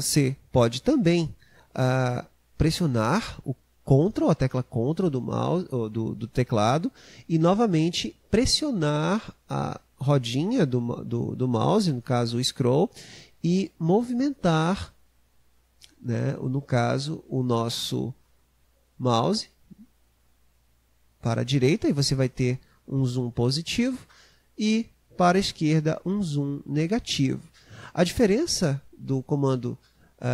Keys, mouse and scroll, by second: 13.6-16.6 ctrl+middle drag.